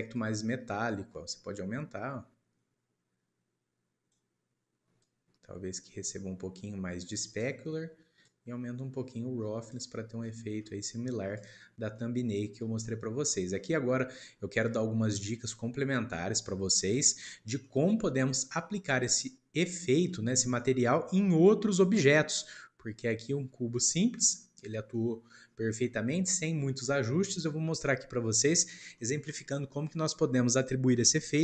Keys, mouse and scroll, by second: 0.2-3.1 drag, 5.0-8.0 drag, 8.2-10.2 drag, 10.2-11.3 middle drag, 11.3 click, 11.7 scroll down 2, 12.0-12.5 middle drag, 12.5-13.2 scroll up 2, 13.3-17.0 shift+middle drag, 17.0-17.5 scroll down 2, 17.6-24.4 middle drag, 24.4 scroll down 2, 24.9-25.8 middle drag, 25.8-26.3 scroll up 2, 26.3-28.5 middle drag, 28.5-28.9 scroll down 1, 28.9-31.4 middle drag.